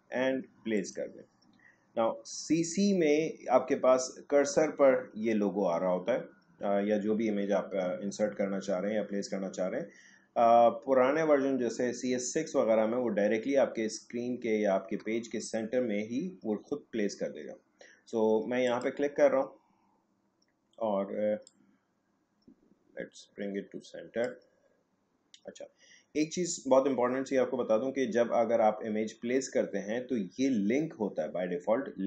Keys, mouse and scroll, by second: 18.6 click, 21.4-26.6 drag.